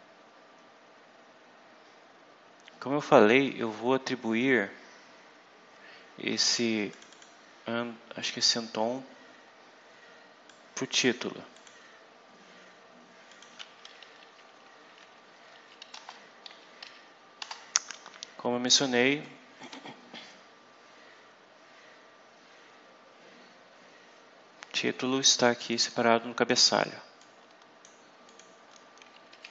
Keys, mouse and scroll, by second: 6.8 click, 10.3 click, 11.4 click, 13.2 click, 14.0 Up, 15.1 Up, 15.8 Return, 16.7 Up, 17.3 Return, 19.1 click, 20.3 scroll down 2, 20.6-21.0 scroll up 2, 22.1 scroll down 2, 23.0 scroll down 2, 25.5 click, 27.1 click, 28.1 click, 29.2 Up.